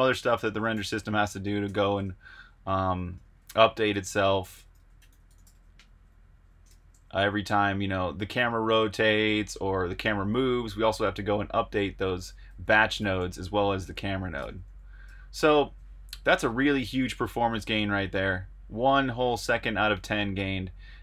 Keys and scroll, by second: 0.0-6.9 typing, 8.6-9.4 typing, 12.2 Escape, 12.2-15.0 typing, 16.2 super+Tab.